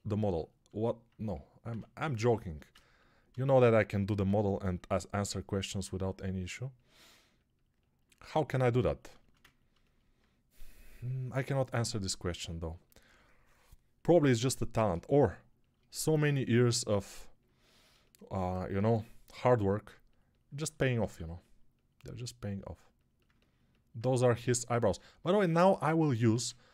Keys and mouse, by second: 4.1 g, 20.9 alt+q, 26.2 alt+q.